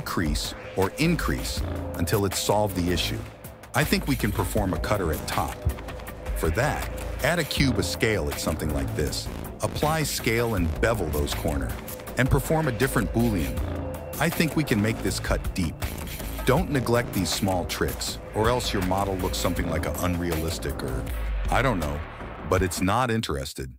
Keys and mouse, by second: 3.6 shift+a, 4.2 s, 5.1 click, 5.4-10.7 typing, 10.4 ctrl+a, 10.9 ctrl+b, 11.7 Tab, 11.9 click, 12.3 /, 12.5 shift+click, 12.8 ctrl+KP_Subtract, 13.7 click, 14.0 g, 14.5 s, 15.7 KP_1, 16.0 s, 17.7 m, 19.1 middle click, 19.7 KP_1, 22.3 click, 23.0 ctrl+s.